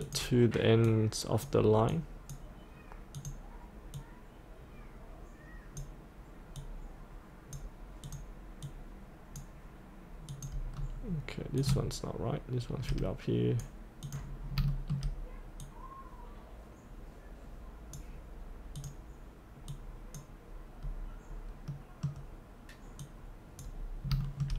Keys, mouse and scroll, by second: 0.1-10.1 drag, 10.8-11.6 scroll down 1, 11.6-14.1 drag, 14.4 scroll up 1, 14.7 shift+middle click, 15.7-18.2 drag, 21.7 middle click, 23.0 click, 23.9 scroll up 1, 24.2-24.5 shift+middle drag.